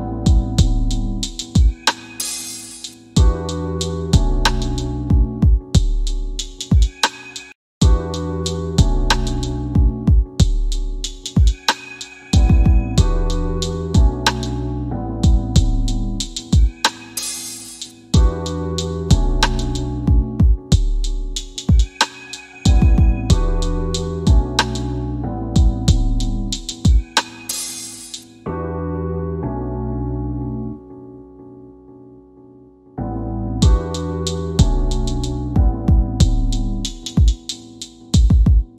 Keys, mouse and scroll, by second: 0.6 scroll down 1, 1.2 scroll up 1, 2.0 scroll up 1, 2.4 middle click, 4.2 scroll down 1, 4.8 scroll up 1, 5.5 scroll up 1, 6.0-6.9 scroll down 1, 8.0 scroll up 1, 8.6 scroll up 1, 9.1 scroll up 1, 9.6 middle click, 11.8 scroll down 1, 14.5 Escape, 15.5-15.9 scroll down 1, 15.9 scroll up 1, 16.6 middle click, 17.9 click, 21.7 click, 22.5-23.7 scroll down 1, 23.7 click, 25.7-26.7 typing, 26.6 scroll down 1, 27.8 click, 28.3 scroll up 1, 29.0 alt+middle click, 30.2 scroll up 1, 30.6 middle click, 31.2 scroll down 1, 32.2 click, 32.8 alt+middle click, 34.7 click, 35.7 scroll down 1, 36.7 click.